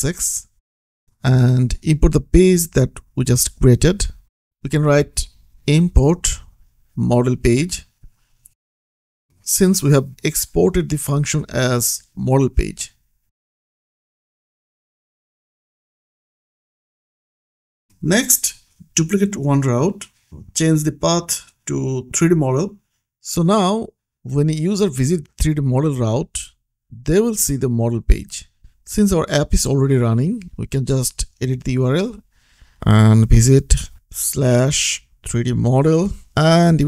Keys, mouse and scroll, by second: 0.7 click, 2.4 click, 4.1 Up, 5.1 Return, 6.0 m, 6.8 Return, 7.2-8.5 typing, 10.7 click, 12.8 click, 15.2 click, 17.5-18.1 scroll down 1, 18.1 click, 20.8 shift+click, 21.6-23.0 typing, 24.5 click, 24.8-25.5 scroll up 1, 25.6 click, 26.0 ctrl+c, 26.8 click, 27.2 ctrl+v, 27.8 ctrl+s, 30.2 click, 31.6 Right, 34.1-36.0 typing.